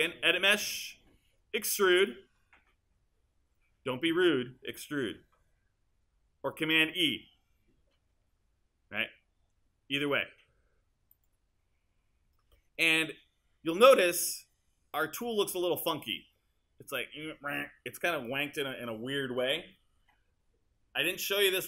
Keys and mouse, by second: 21.1 click.